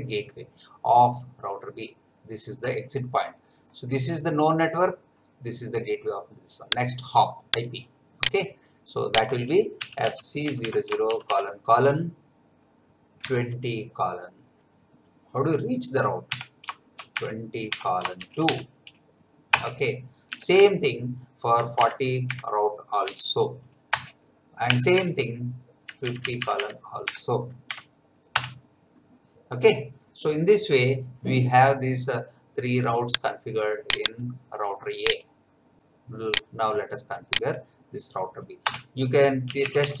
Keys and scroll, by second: 9.5-11.0 typing, 13.2 2, 16.3-19.0 typing, 19.5 Return, 20.3 Up, 20.6 Left, 22.2 BackSpace, 23.0 4, 23.9 Return, 24.7 Up, 24.9 Left, 27.0 BackSpace, 27.7 5, 28.3 Return, 38.6 Return, 39.2-40.0 typing.